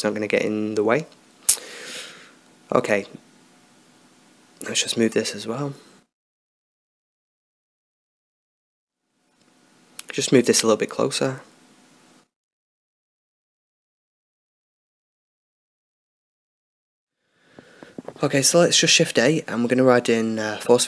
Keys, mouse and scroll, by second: 2.1 middle click, 3.5-5.9 middle drag, 6.1-7.7 drag, 7.1-9.4 middle drag, 9.4-11.8 right drag, 11.8-13.3 drag, 14.4-16.6 middle drag, 19.3 shift+a.